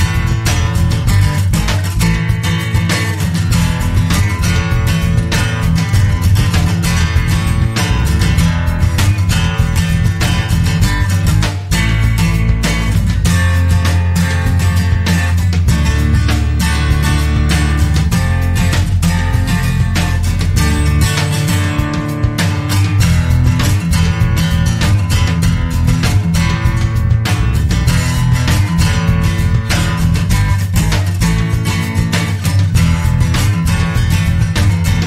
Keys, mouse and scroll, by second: 7.9 click, 9.3 scroll down 1, 9.8-10.2 scroll up 1, 10.9-11.2 scroll up 2, 12.2 click, 16.3 click, 21.0 click, 22.1-22.5 scroll up 1, 23.0 scroll down 2, 24.0-24.5 scroll up 2, 24.8-25.2 scroll down 2, 26.6-27.1 scroll up 2, 28.3 click, 30.4 click, 32.6 click.